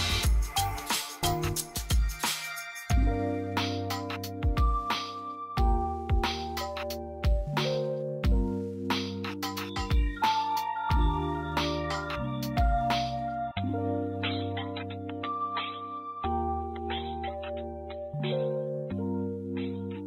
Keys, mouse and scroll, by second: 0.1 c, 1.2-5.3 drag, 5.9 c, 6.9 ctrl+z, 7.8-9.8 drag, 9.8 ctrl+g, 10.3 click, 11.0 ctrl+g, 11.6 click, 12.2 ctrl+g, 12.9 click, 14.4 c, 15.0-20.0 drag.